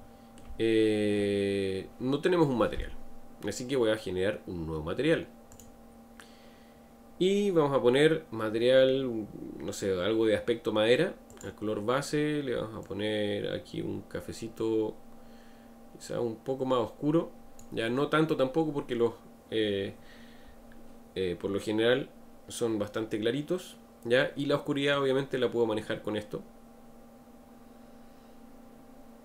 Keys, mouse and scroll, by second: 5.5-8.5 drag, 11.3 click.